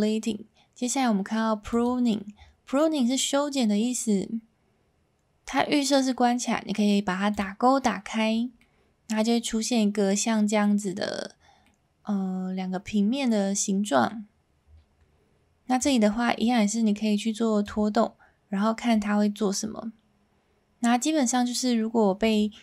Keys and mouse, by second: 2.7-3.2 middle drag, 7.3 click, 8.6-9.2 middle drag, 11.6-14.1 middle drag, 15.7-17.6 drag, 19.0-22.4 drag.